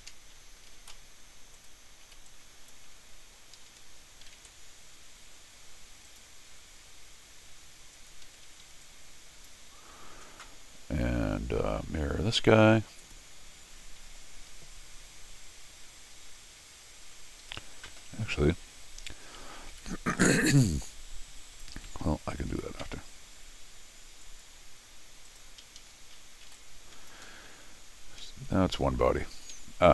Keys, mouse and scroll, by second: 0.7 ctrl+shift+x, 1.5 click, 2.3 click, 3.0 scroll down 2, 3.6 Escape, 3.7 Escape, 4.4 alt+l, 6.1 click, 7.9 click, 8.2 Escape, 8.5 Escape, 8.6 Escape, 8.8 click, 13.0 click, 13.6 scroll down 2, 17.4 Escape, 17.6 Escape, 20.6 click, 21.7 Escape, 22.5 ctrl+r, 24.2 click, 25.3 click, 25.6 Escape, 25.8 Escape, 25.9 scroll down 2, 26.0 scroll up 4, 26.6 click, 27.3 scroll down 4, 28.8-29.1 scroll up 2, 29.3 Escape, 29.5 Escape, 29.7 middle click.